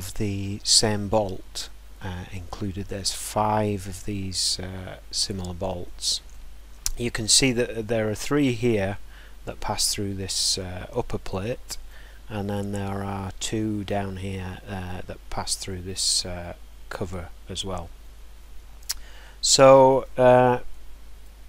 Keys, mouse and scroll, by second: 11.8-16.2 middle drag, 18.7-19.2 scroll, 20.0 scroll, 21.2-21.4 scroll.